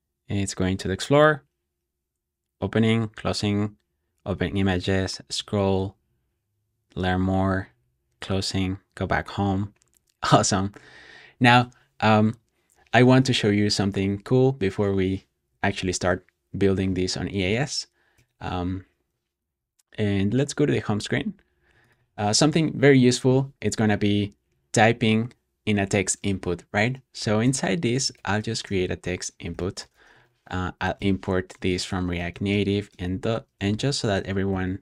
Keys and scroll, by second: 15.7 super+p, 17.1-18.0 typing, 18.0 Return, 22.2 Escape, 26.4-34.8 typing.